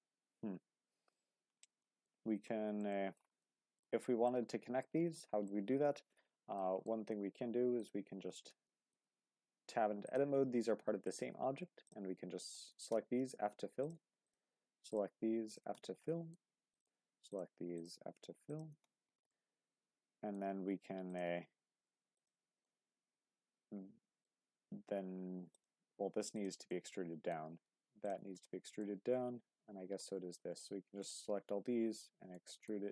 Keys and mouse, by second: 1.8 shift+middle drag, 2.5-2.9 middle drag, 2.9 shift+middle drag, 3.4-3.8 middle drag, 4.0 shift+middle drag, 4.5-4.9 middle drag, 5.2 shift+middle drag, 6.6 middle click, 7.8 click, 8.3 shift+middle drag, 8.7 middle click, 9.1 Tab, 10.0 click, 11.0 shift+click, 13.8 click, 14.9 shift+click, 15.7 f, 16.1 middle click, 18.5 shift+click, 18.8 f, 19.3-20.3 middle drag, 21.1 click, 22.1 shift+click, 22.7-24.3 middle drag, 25.5 click, 26.7 middle click, 28.0 shift+click, 28.5 shift+middle click, 28.8-30.0 middle drag, 31.0 shift+click, 31.7 middle click, 32.3 middle click, 32.8 e.